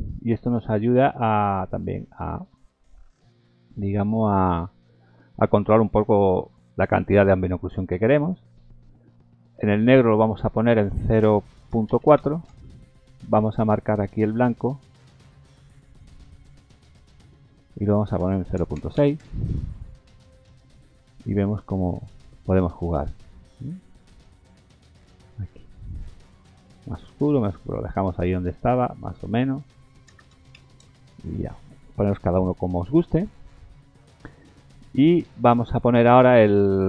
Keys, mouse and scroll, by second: 10.9 click, 15.9 click, 16.8 click, 17.8 click, 22.5 click, 29.3 click, 33.8-34.3 scroll down 1.